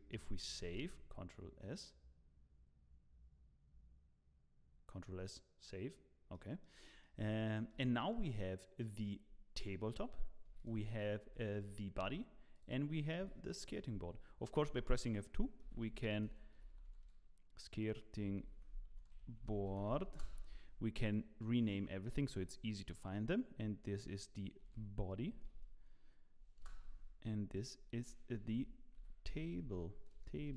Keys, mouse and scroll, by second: 5.5-6.3 scroll down 3, 6.3 middle click, 6.8 scroll down 1, 7.0 middle click, 7.4 shift+middle click, 7.8 middle click, 8.8 click, 10.0 g, 10.6 click, 11.3 g, 12.5 click, 13.2 g, 14.6 F2, 21.0 click, 24.1 shift+F2, 27.5 click.